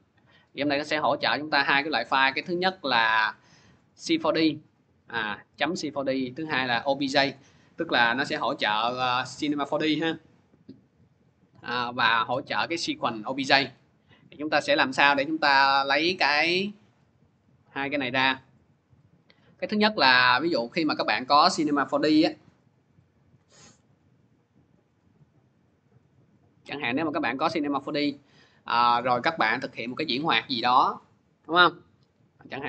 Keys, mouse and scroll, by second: 1.5 click, 2.5 click, 3.0 click, 8.2 click, 13.8 click, 14.4 click, 15.5 click, 16.1 click, 16.9 click, 17.9 click, 19.5 click, 20.5 click, 20.7 click.